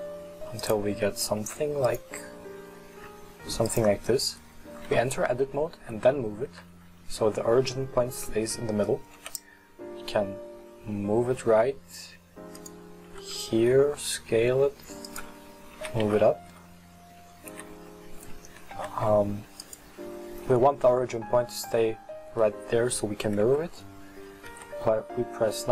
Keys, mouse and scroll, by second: 1.0-1.5 scroll up 4, 1.5 s, 2.2 scroll up 4, 3.0 s, 5.4 Tab, 9.2 g, 13.1 s, 15.8 f, 17.5 g, 21.3-23.5 middle drag, 23.5 KP_2, 24.6 KP_3.